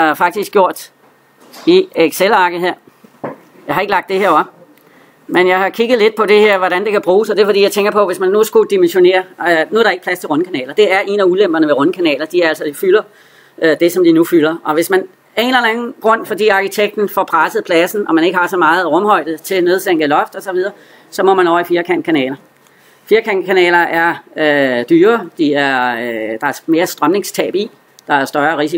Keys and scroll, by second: 0.4 alt+Tab.